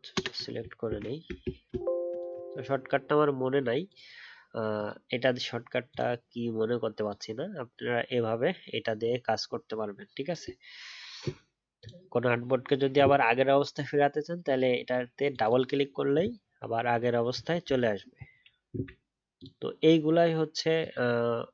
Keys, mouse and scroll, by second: 0.1 ctrl+Return, 0.8 ctrl+d, 1.6 alt+shift+space, 2.1 alt+shift+click, 17.7 alt+scroll up 1.